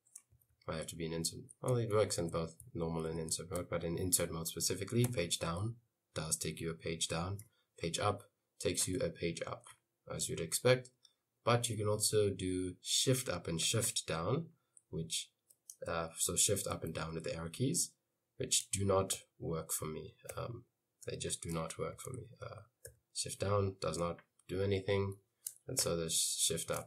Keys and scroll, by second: 0.4-4.1 typing, 5.2 Page_Down, 6.1 Page_Down, 7.5 Page_Up, 8.5 Page_Up, 19.2 shift+Up, 21.4 shift+Down, 21.8-22.7 typing, 22.9 shift+Down, 25.3 i, 25.9 shift+Up.